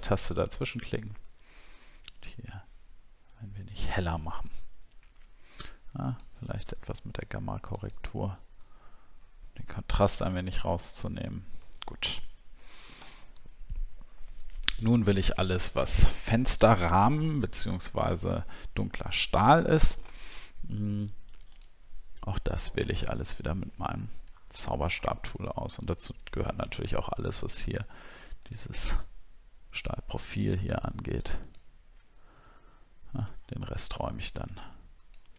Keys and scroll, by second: 24.3 alt+scroll up 1, 24.9-25.4 alt+scroll up 2, 26.3 alt+scroll up 1, 33.4-34.4 alt+scroll down 1.